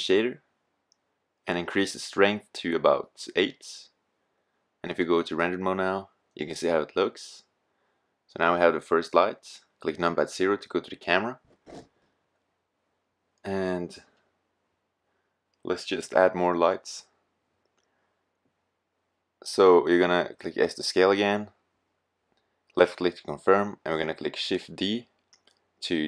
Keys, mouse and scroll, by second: 2.7-4.3 middle drag, 8.6 KP_0, 12.5 KP_7, 15.7 g, 19.1-20.1 drag, 19.4 s, 22.9-24.5 drag, 25.6 shift+d.